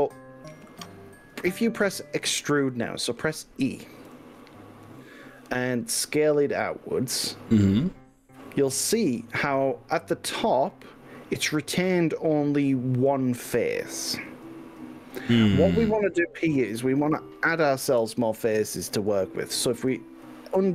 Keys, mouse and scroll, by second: 4.1 e, 8.4 click, 8.9-17.8 middle drag, 18.6 ctrl+z.